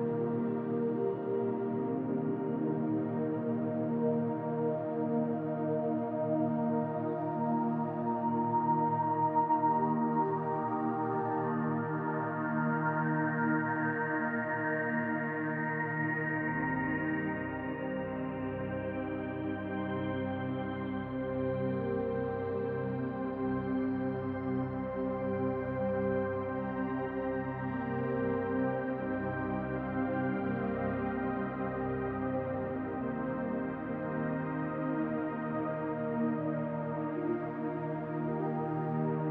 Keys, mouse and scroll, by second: 0.2 middle click, 1.5 middle click, 2.9 r, 4.5 click, 6.0 click, 6.4 middle click, 7.0 click, 8.1 middle click, 8.8 click, 10.1 click, 11.3 middle click, 12.1 click, 13.8 r, 15.6 middle click, 17.5 middle click, 18.8 r, 21.1 middle click, 22.7 click, 23.5 click, 24.0 middle click, 24.8 scroll down 1, 25.1 shift+middle click, 25.6 middle click, 26.5 shift+middle click, 26.9-27.3 scroll down 4, 27.2 middle click, 28.2 shift+middle click, 29.2 middle click, 29.6 shift+middle click, 30.3-30.6 scroll down 2, 31.4 click, 32.8 shift+d, 33.3 middle click, 34.4 click, 36.3 click, 37.7 middle click, 38.5 click.